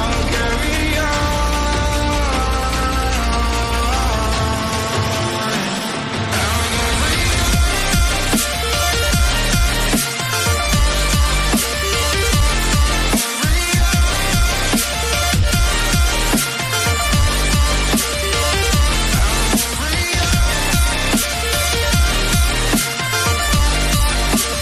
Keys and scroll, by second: 2.9 ctrl+g, 10.7 ctrl+j, 23.0 ctrl+j.